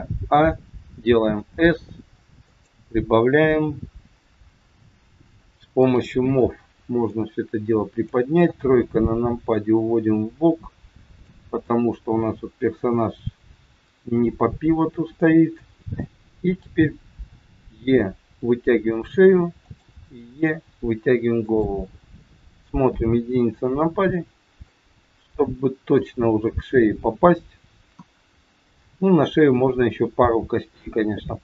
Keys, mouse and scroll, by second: 0.2 a, 1.3 s, 5.8 click, 6.9 click, 8.3 KP_3, 9.4 click, 17.3 e, 19.9 e, 22.6 KP_1, 24.6 middle click, 27.8 KP_1.